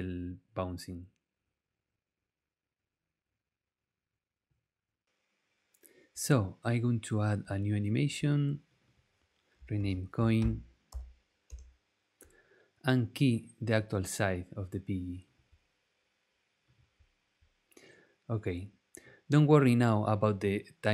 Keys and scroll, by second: 9.5-11.4 typing, 11.5 Return.